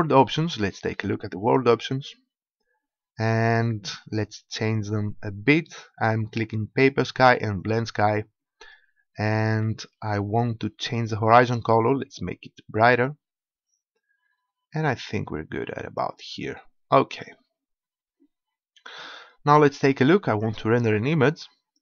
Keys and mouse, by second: 1.4-3.3 drag, 4.7-6.5 drag, 7.5-12.7 drag, 20.3-21.8 drag.